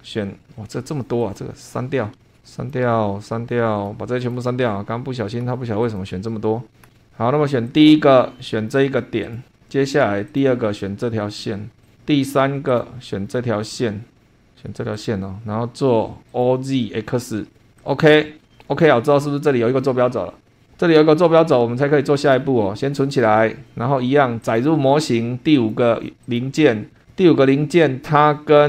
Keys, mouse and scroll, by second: 1.3 click, 1.9 BackSpace, 2.5 click, 2.8 BackSpace, 4.2 click, 4.5 BackSpace, 5.8 click, 6.1 BackSpace, 7.7 click, 9.3 click, 10.3 click, 11.8 click, 12.7 click, 14.5-14.9 scroll up 1, 14.9 click, 16.3 click, 17.7 click, 18.3 scroll down 2, 22.2 click, 24.4 click, 25.5 click, 26.2 click, 26.9 scroll down 1, 28.1 click.